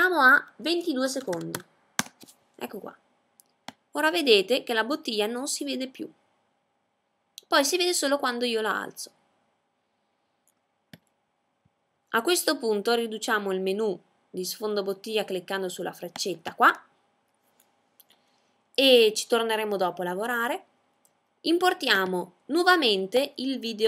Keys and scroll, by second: 1.5 2.